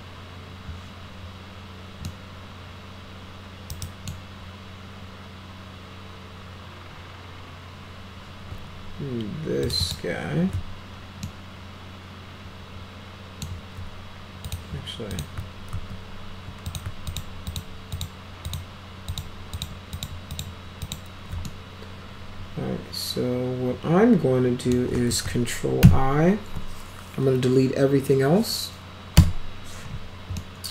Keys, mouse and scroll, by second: 2.1-4.1 middle drag, 3.7 right click, 9.6 ctrl+click, 9.8 ctrl+click, 11.3-13.4 alt+middle drag, 14.5 click, 15.1 click, 15.7 ctrl+z, 16.7 click, 17.1 ctrl+click, 17.5 ctrl+click, 17.9 ctrl+click, 18.5 ctrl+click, 19.1 ctrl+click, 19.6 ctrl+click, 20.0 ctrl+click, 20.3 ctrl+click, 20.8 ctrl+click, 21.5-24.7 alt+middle drag, 25.8 ctrl+i, 29.2 Delete, 30.4-30.7 alt+middle drag.